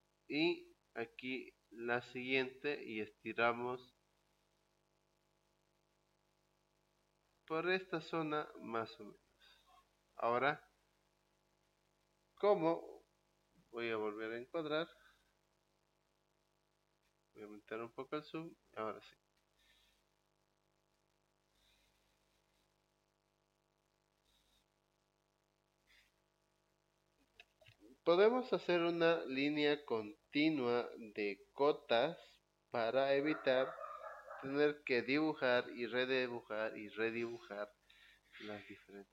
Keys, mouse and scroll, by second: 1.4 click, 3.4-4.4 scroll down 2, 4.4-4.7 scroll up 2, 4.7-5.7 scroll down 2, 8.8 click, 10.2 scroll up 2, 13.7 e, 15.0 Return, 15.5 click, 16.6 middle click, 17.4-19.2 drag, 19.4 Escape, 19.8 click, 20.9 Escape, 22.2 e, 22.9 Return, 23.4-24.7 drag, 25.2 Escape.